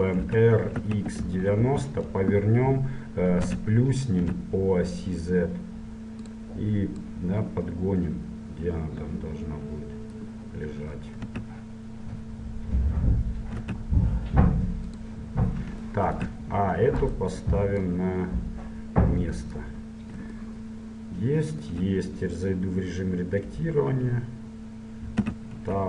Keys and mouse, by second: 0.3 r, 3.7 s, 7.2-9.1 drag, 11.3 s, 16.0-17.1 middle drag, 17.1-19.1 right drag, 17.9-19.8 drag, 20.0-25.3 middle drag, 25.3 Tab.